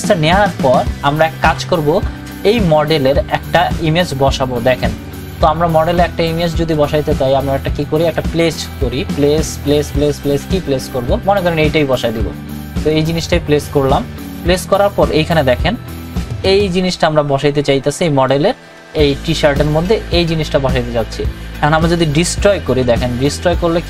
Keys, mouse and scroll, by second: 4.9 click, 4.9 click, 8.0 click, 12.6-20.4 drag, 21.8 right click.